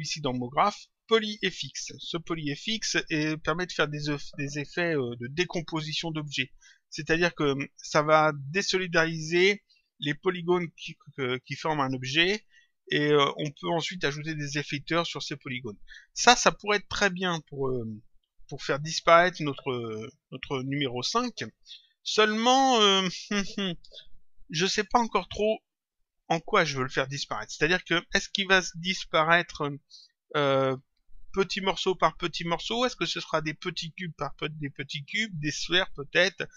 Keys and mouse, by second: 0.2 click.